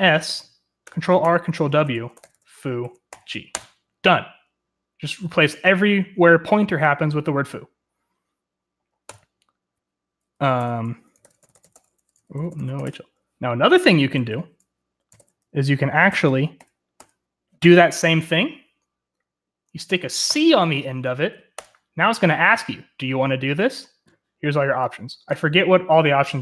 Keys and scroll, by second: 0.0-0.2 typing, 0.8 ctrl+r, 1.2 ctrl+w, 1.6-3.1 typing, 3.5 Return, 10.0 u, 11.2 ctrl+c, 11.6-13.5 typing, 12.3 Return, 15.0-15.8 typing, 16.1 Up, 16.6 Up, 17.1 Up, 20.3 c, 21.6 Return.